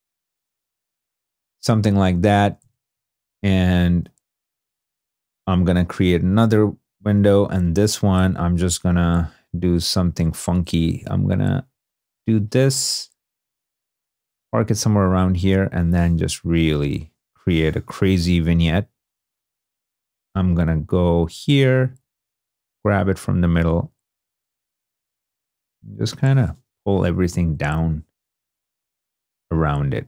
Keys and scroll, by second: 3.2 shift+d, 6.1 alt+s, 7.0 alt+super+s, 7.2 alt+super+-, 26.8 super+d.